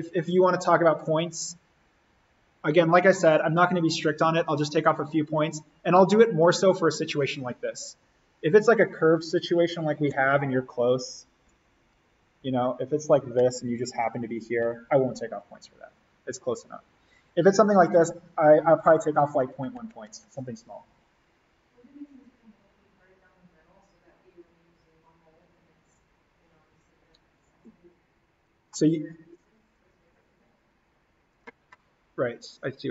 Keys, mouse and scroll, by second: 2.7-3.2 scroll down 1, 4.8 click, 10.1 click, 31.2 click.